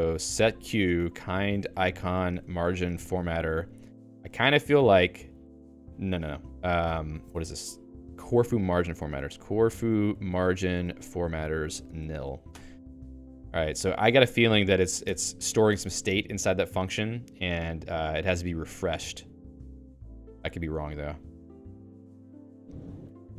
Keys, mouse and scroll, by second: 14.2 q, 15.0 Escape, 15.4 shift+a, 15.8 Escape, 16.0 h, 18.4 a, 19.6 ctrl+e, 20.2 Escape, 20.8 k, 22.2-23.3 typing, 22.6 Return.